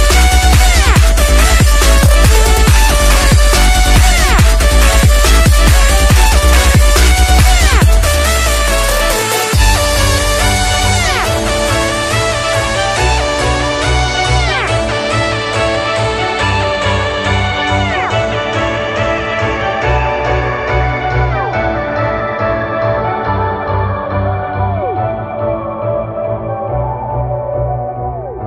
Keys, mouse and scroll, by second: 0.1-0.7 alt+scroll down 3, 0.9 scroll up 1, 3.7 click, 6.7 click, 19.6 ctrl+c, 20.1 click, 22.0 v, 23.0 click, 27.4 scroll up 1.